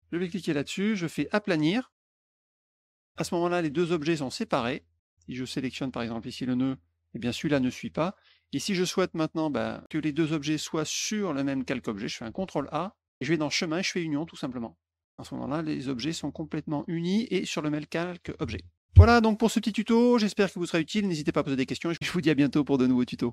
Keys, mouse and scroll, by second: 0.2 click, 1.4 click, 2.5 click, 3.0 click, 3.9 click, 4.3 click, 5.2 click, 5.7 click, 6.4 click, 8.0 click, 8.9 click, 13.2 click, 14.2 click, 16.0 middle click, 16.1 middle click, 16.2 middle click, 16.6 middle click, 20.7 click.